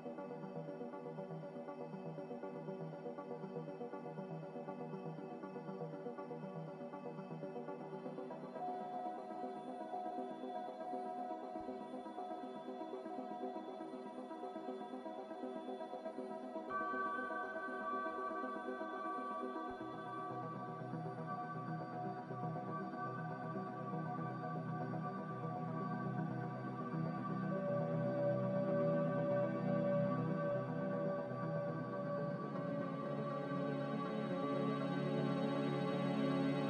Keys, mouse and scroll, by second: 2.9 z, 15.3 b, 17.9 x, 19.2 5, 19.4 Return, 21.4 g, 26.9 z.